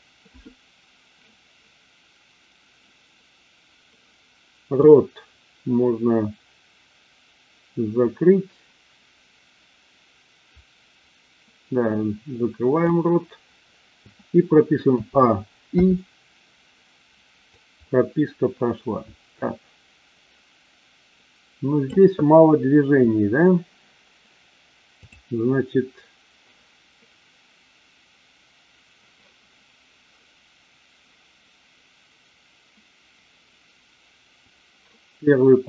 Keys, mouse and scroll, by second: 4.8-12.9 drag, 14.9 a, 15.7 i, 17.4-21.8 drag, 24.9 click.